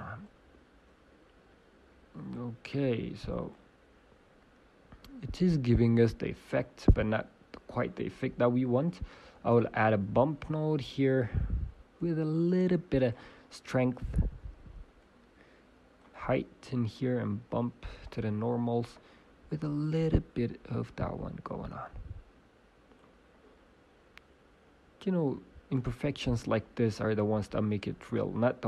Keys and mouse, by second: 11.9 shift+space, 16.0-19.0 drag, 19.1-22.0 drag.